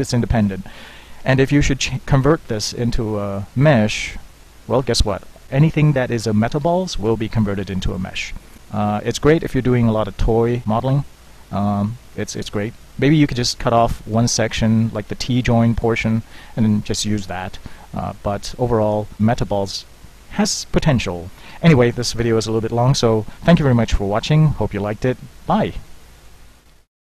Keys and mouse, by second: 3.7 alt+c, 6.2-6.9 middle drag, 7.0 middle click, 10.3 Tab, 10.8 z, 12.1 a, 18.1 middle click, 18.9 Tab, 22.9-26.2 drag.